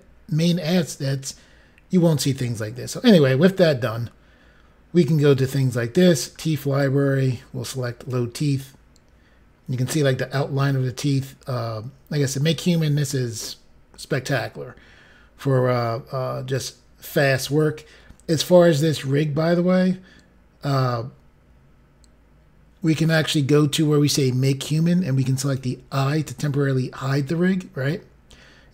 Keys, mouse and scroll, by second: 5.6 click, 6.3-7.5 scroll down 4, 7.5 scroll down 1, 8.0 click, 16.3-16.7 scroll up 1, 25.4 click.